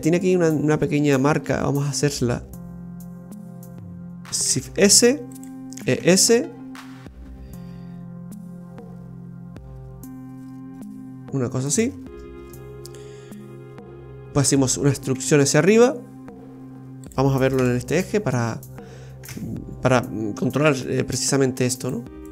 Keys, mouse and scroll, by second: 4.5 shift+s, 5.7 e, 12.0-12.4 scroll down 5, 15.1 e, 17.6 KP_3, 19.4 z.